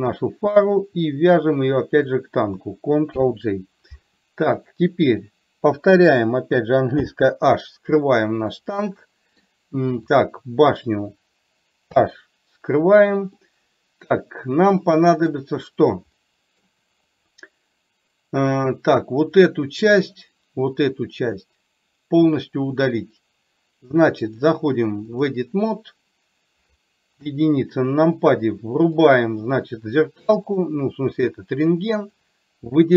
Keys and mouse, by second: 0.2 click, 3.2 ctrl+j, 4.7 click, 8.6-9.6 middle drag, 13.3-15.3 middle drag, 16.3 middle click, 17.2 click, 24.5-25.3 drag, 27.3 KP_1, 30.6 click, 31.8 click.